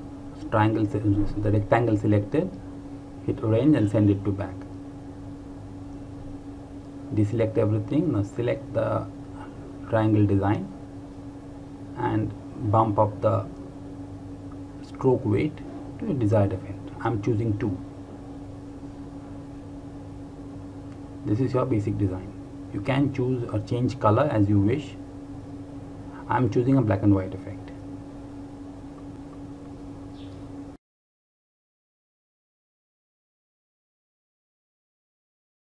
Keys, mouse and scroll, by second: 4.0 click, 13.2 click, 16.0-18.2 scroll up 1, 18.5 click, 26.1 click.